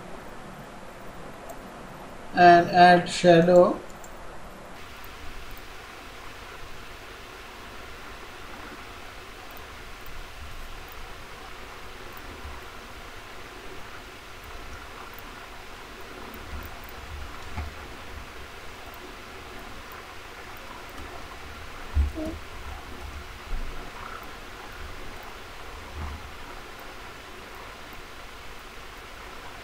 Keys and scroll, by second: 16.5 ctrl+c, 17.1 ctrl+a, 17.5 ctrl+v, 26.0 ctrl+b, 28.8 ctrl+b.